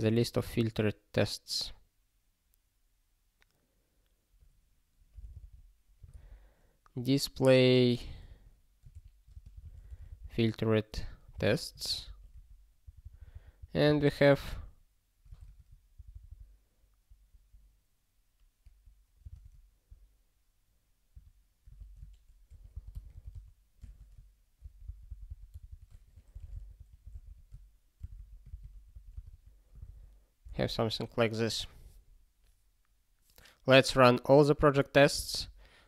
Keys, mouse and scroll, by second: 0.0 (, 4.9-6.6 typing, 9.0 ctrl+g, 9.3 space, 9.5 f, 11.4 Return, 11.9 ctrl+s, 12.1 ctrl+p, 12.3 ctrl+a, 12.8 ctrl+n, 13.0 ctrl+n, 13.8 ctrl+space, 13.9 ctrl+n, 15.4 alt+;, 15.9 ctrl+n, 16.1 ctrl+n, 16.8 ctrl+p, 19.2 ctrl+space, 19.3 ctrl+n, 21.1 alt+;, 21.7 ctrl+p, 22.5 alt+f, 22.7 alt+b, 22.9 alt+d, 23.1 s, 24.6 ctrl+e, 24.8 ctrl+b, 25.5 ctrl+d, 25.7 ctrl+d, 26.1 (, 28.1 Return, 28.2 ctrl+a, 28.5 ctrl+k, 28.7 ctrl+p, 28.9 ctrl+p, 29.1 Return, 29.3 ctrl+y, 29.9 ctrl+s.